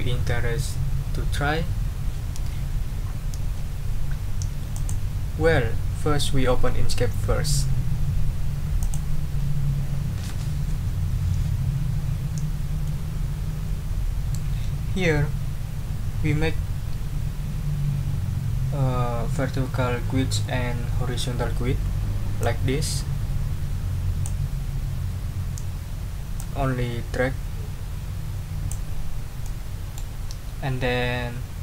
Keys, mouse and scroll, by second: 4.7 click, 8.8 click, 22.4-24.4 drag, 26.3-28.9 drag, 29.4-30.1 middle drag.